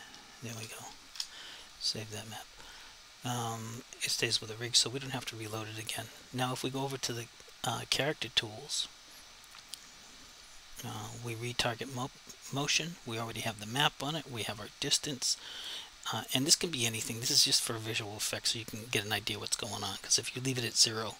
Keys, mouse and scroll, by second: 0.2 p, 0.6 Return, 3.7 click, 6.1 click, 9.5 click.